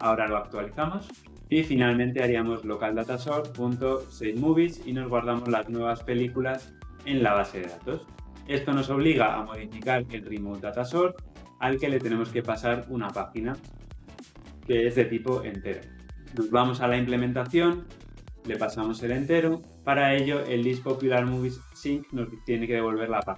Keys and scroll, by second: 2.9 Return, 10.6 ctrl+b, 14.6 Escape, 19.7 Escape.